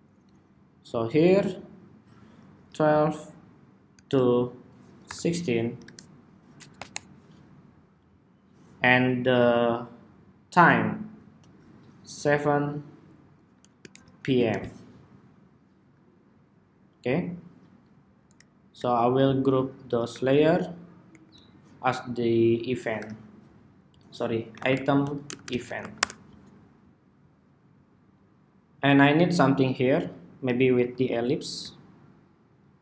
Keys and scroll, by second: 6.5 ↺, 13.9 ↺, 20.2 super+g.